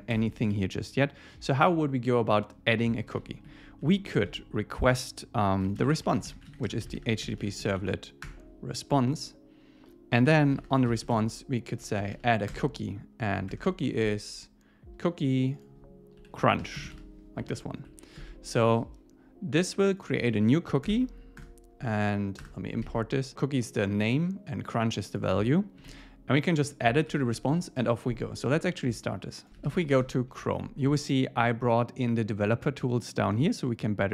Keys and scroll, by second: 0.5 Down, 3.2 Up, 3.5 Right, 3.8 Left, 8.3 Return, 8.9 Down, 12.5 Return, 13.5 Tab, 18.5 super+Right, 20.9 alt+Return, 21.4 Return, 25.9 super+s, 27.1 super+s, 30.0 Home.